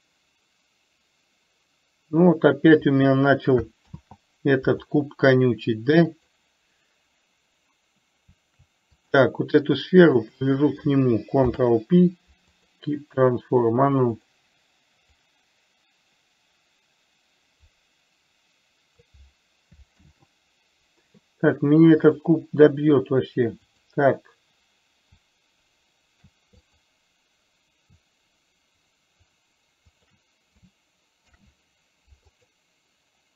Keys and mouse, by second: 4.3 ctrl+z, 6.5 click, 9.3 click, 10.6 shift+click, 11.7 ctrl+p, 14.6 click, 15.7-19.5 drag, 20.3 ctrl+z, 22.6 click, 24.1 click, 27.1 click, 30.5 shift+click, 31.6 ctrl+p.